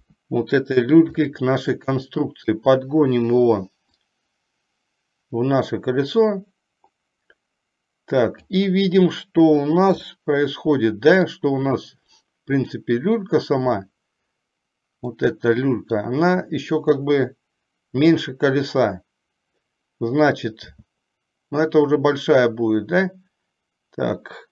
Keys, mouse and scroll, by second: 0.2 KP_1, 1.3-2.8 middle drag, 4.1-8.7 drag, 10.2 scroll up 1, 10.3-11.6 middle drag, 12.7 click, 15.3 middle click, 20.7 s.